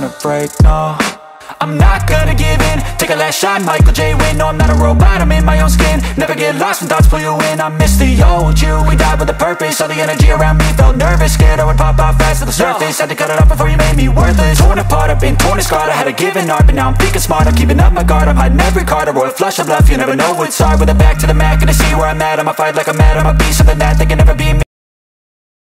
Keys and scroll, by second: 12.9 ctrl+g, 18.8 Delete.